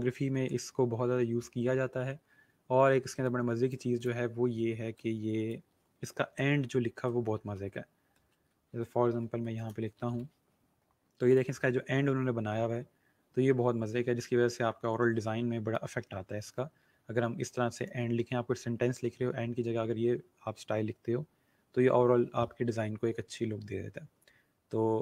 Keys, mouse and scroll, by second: 1.3 scroll up 1, 3.2 click, 7.3-10.5 typing, 11.2 click, 11.5 scroll down 1, 24.5 scroll up 1.